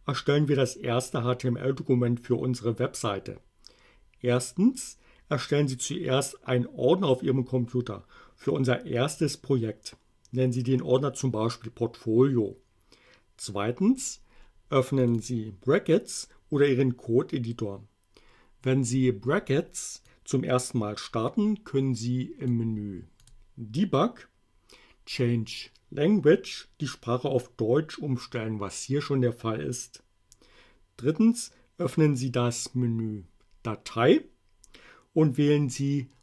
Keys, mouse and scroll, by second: 15.0 click, 20.1-22.7 drag, 23.2 click.